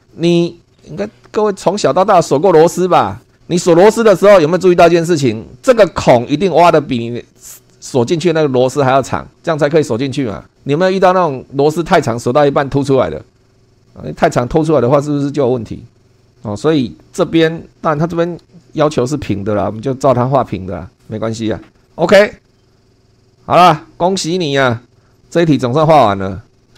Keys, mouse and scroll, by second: 19.6 super+2, 21.8 click, 24.2 click, 24.9 click, 25.1 click.